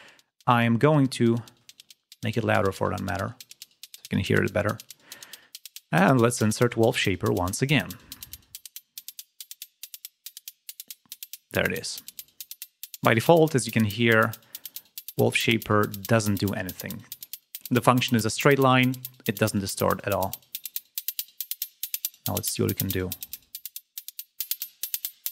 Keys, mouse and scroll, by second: 0.8-2.9 drag, 5.7 right click, 8.0-8.7 scroll down 2, 11.2 click, 13.0 click, 14.6-16.0 drag, 19.8-22.0 drag, 22.5 click, 24.0 click.